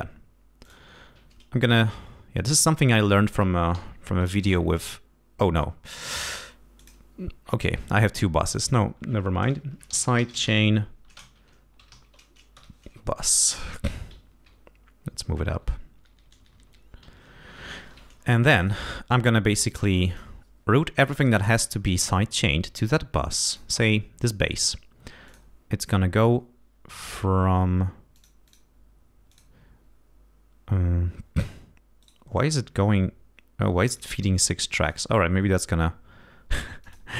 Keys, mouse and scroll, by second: 0.6 click, 2.0 scroll down 2, 3.1 click, 3.7 2, 4.4 Return, 6.0 click, 6.8 click, 8.4 click, 9.4-12.4 typing, 12.5 Return, 13.2 ctrl+Up, 14.1 ctrl+Down, 14.4 ctrl+Up, 17.0 ctrl+Down, 17.5 ctrl+Up, 18.6 click, 20.1 click, 20.8-21.4 scroll down 1, 21.8 scroll up 1, 22.5-22.8 scroll up 1, 23.5 click, 25.2 click, 27.0 click, 28.1 click, 28.4 click, 29.3 click, 32.0 right click, 33.9 click, 34.8 click, 36.8 click.